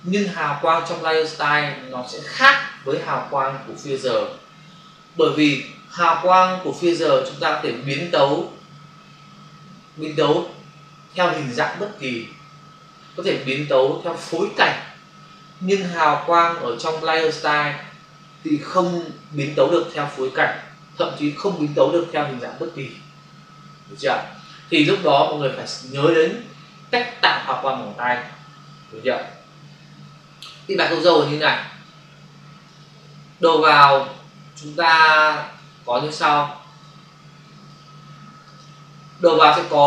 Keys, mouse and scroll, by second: 31.0 click, 31.9 click, 33.9 click, 34.5 click, 35.9 click, 36.6 click, 36.8 double click, 37.4 click, 38.3 click, 39.6 click.